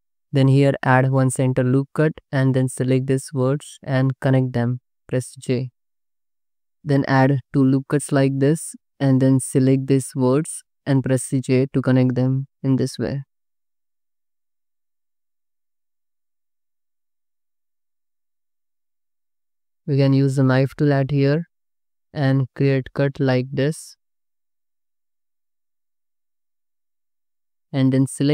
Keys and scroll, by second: 1.0 ctrl+r, 5.4 j, 6.9 ctrl+r, 10.7 j, 12.7 j, 14.0 ctrl+r, 14.5-17.6 typing, 18.8 ctrl+z, 19.2 j, 20.8 1, 22.6 space, 23.8 space, 24.5 Escape, 25.7 space, 26.4 space, 27.1 c, 27.9 a.